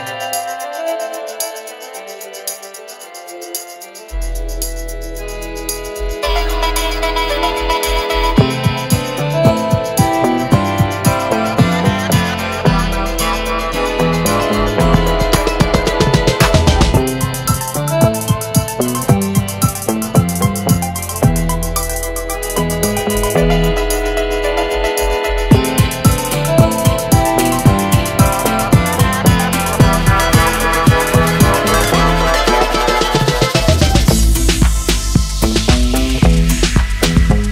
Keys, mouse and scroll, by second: 2.0 click, 3.4 shift+drag, 4.4 click, 6.0 shift+click, 6.9 click, 8.1-9.7 drag, 12.2-14.4 drag, 17.0 shift+click, 17.8-19.3 drag, 19.8-20.5 shift+middle drag, 20.1 shift+click, 21.2 shift+middle click, 23.0 click, 24.2 click, 25.6 click, 30.2 click, 30.9 click, 32.7-34.5 drag, 36.3-37.5 drag.